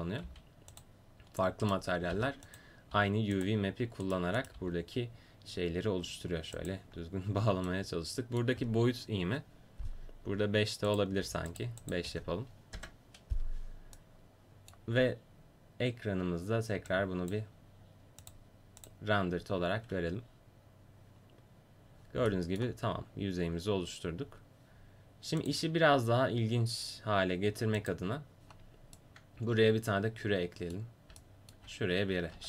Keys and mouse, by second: 0.2 g, 1.7 click, 2.1 g, 2.9 g, 4.6 g, 10.9-14.0 drag, 14.2 middle click, 16.9-21.1 drag, 22.3-24.3 middle drag, 25.6-26.7 right drag, 26.7 click, 29.0-30.1 middle drag, 30.2 middle click, 30.4 middle click, 32.3 shift+a.